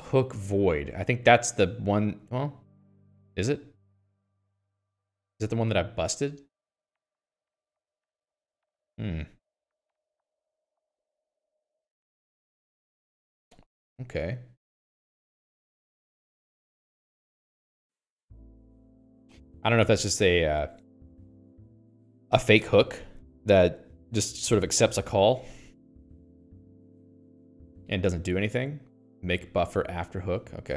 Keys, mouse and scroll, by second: 4.3 click, 5.1 click, 5.7 click, 8.7 q, 9.4 j, 12.4 middle click, 13.2 click, 13.4 q, 15.2 middle click, 16.0 click, 17.8 click, 18.3 click, 18.7 q, 23.2 middle click, 26.7 click, 26.7 q, 27.5-29.9 scroll down 16, 29.9 middle click.